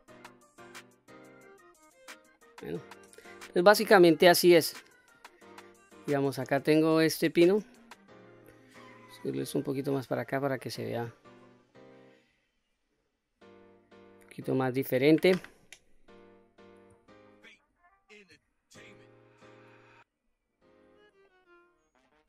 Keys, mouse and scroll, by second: 1.1 click, 1.6-1.9 scroll down 3, 1.9 middle click, 2.9-3.5 scroll down 1, 3.5-3.8 scroll up 3, 4.7 click, 6.6 1, 7.5 click, 8.3-10.0 drag, 10.6-13.2 middle drag, 13.4 click, 14.9 2, 15.6 click, 17.1 alt+click, 18.3 s, 20.3 click, 20.9 middle click, 22.0 middle click.